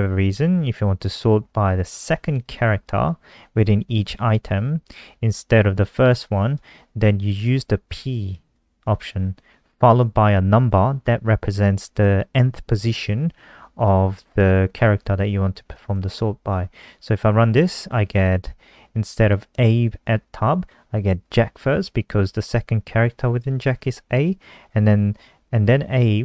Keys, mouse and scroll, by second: 2.3 click, 15.7 ctrl+s, 16.0 F5.